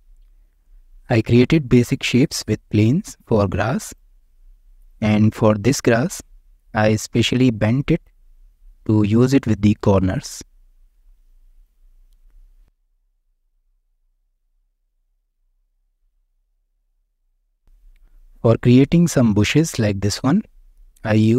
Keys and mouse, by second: 1.5-1.9 shift+middle drag, 2.3 middle click, 3.7 Tab, 3.8 middle click, 4.2-4.5 shift+middle drag, 4.8 drag, 5.2-5.9 middle drag, 6.3-6.6 shift+middle drag, 7.0-7.5 middle drag, 8.0-8.6 middle drag, 9.0 shift+middle drag, 9.8-11.0 middle drag, 11.5 right click, 11.9-12.5 shift+middle drag, 13.0 Tab, 13.8 Tab, 14.6 shift+click, 14.7 shift+middle click, 16.6-17.0 shift+middle drag, 17.2-17.7 middle drag, 21.0 click.